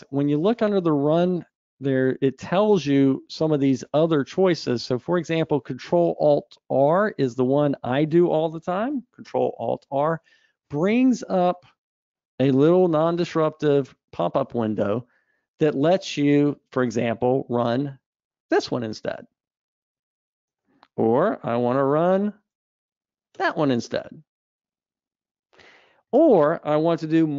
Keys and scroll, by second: 10.0 ctrl+alt+r, 22.2 ctrl+alt+r.